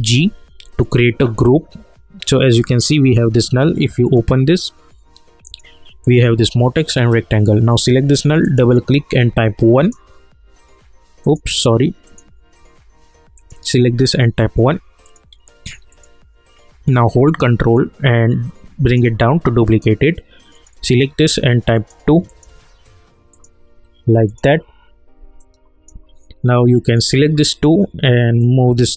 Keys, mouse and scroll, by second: 4.0 click, 9.1 1, 9.7 click, 17.7-19.6 ctrl+drag, 21.2 2, 21.7 click, 25.7 alt+click, 28.7-28.9 drag.